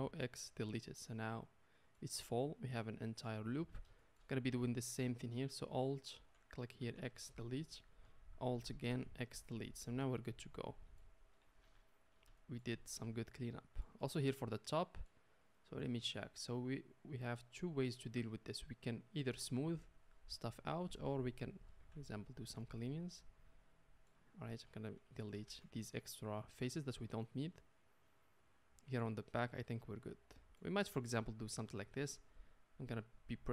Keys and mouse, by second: 0.1 x, 6.1 alt+click, 6.1-8.3 alt+middle drag, 6.8 x, 8.3 alt+click, 8.4-20.4 alt+middle drag, 8.9 x, 11.6 Tab, 14.0 Tab, 20.4 click, 20.5 middle click, 21.1 shift+click, 21.2 shift+middle click, 21.4 shift+click, 21.5-23.0 shift+middle drag, 21.8 x, 23.0 click, 23.1-24.4 middle drag, 24.4 click, 24.5 middle click, 24.7 shift+click, 24.8 shift+middle click, 25.1 shift+click, 25.2-27.6 shift+middle drag, 25.4 x, 27.6 click, 27.8-32.3 middle drag, 32.3-33.5 drag.